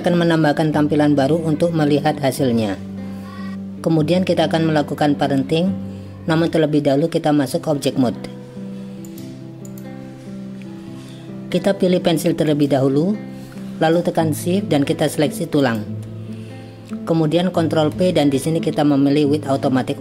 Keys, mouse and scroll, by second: 9.0 click, 12.6 click, 15.7 shift+click, 17.9 ctrl+p.